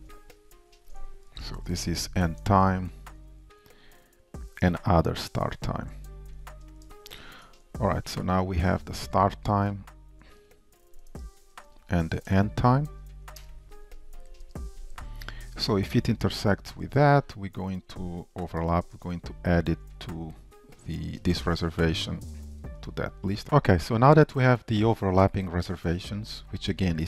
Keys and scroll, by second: 0.1 ctrl+w, 0.1 alt+Up, 2.5 Return, 4.4 ctrl+w, 4.4 alt+Up, 7.3 super+p, 9.7 Escape, 11.2 Return, 13.5 Return, 21.7 Return, 22.8 ctrl+shift+Return.